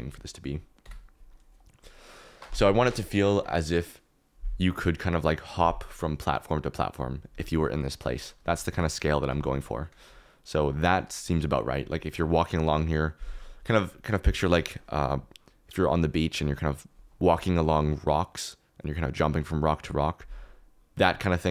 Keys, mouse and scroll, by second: 0.0 s, 0.8 KP_1, 8.4 g, 8.7 x, 9.5 middle click.